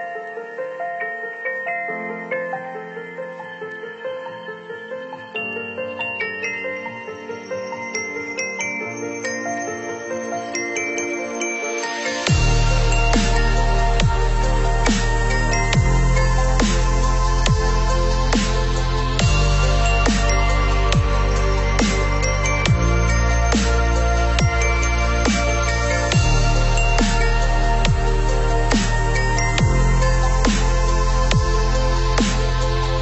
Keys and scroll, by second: 23.6 ctrl+=.